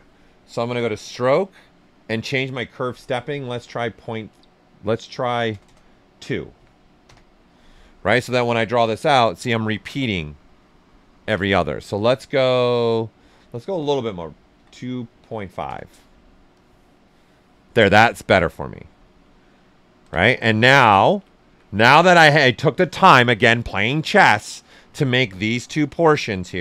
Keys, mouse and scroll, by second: 0.6 click, 3.1-4.4 typing, 6.5 2, 7.0 Return, 8.1-10.9 drag, 11.0 click, 11.1 ctrl+z, 12.2 click, 14.0-15.7 typing, 16.5 click, 17.6 ctrl+right click, 19.9 ctrl+z, 20.5 alt+right click, 20.9 ctrl+right click, 21.1 typing.